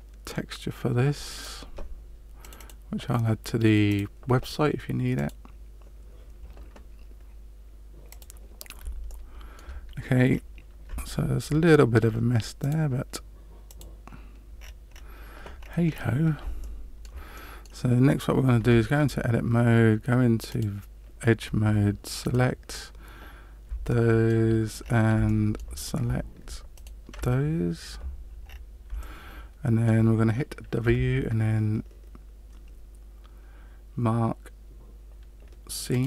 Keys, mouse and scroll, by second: 8.1 click, 9.0 shift+middle click, 10.3-10.8 scroll up 2, 11.1 shift+middle click, 12.6 click, 14.5-15.6 scroll down 6, 15.6 scroll down 1, 15.8-16.2 scroll up 2, 16.6 shift+middle click, 17.3 middle click, 18.5 Tab, 20.4 click, 22.2 alt+right click, 23.8 shift+middle click, 24.8-25.1 scroll up 4, 25.2 shift+middle click, 26.7 alt+shift+right click, 28.4 scroll down 4, 29.0 shift+middle click, 30.8 w.